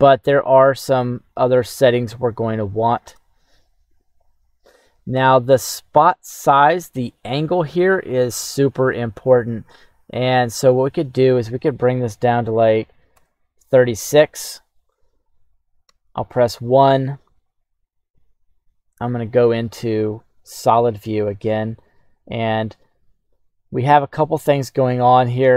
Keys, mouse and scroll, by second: 1.0-2.1 scroll up 1, 2.1-3.3 shift+middle drag, 10.7-13.1 drag, 16.0 KP_1, 18.5 click, 21.1 q, 25.3 click.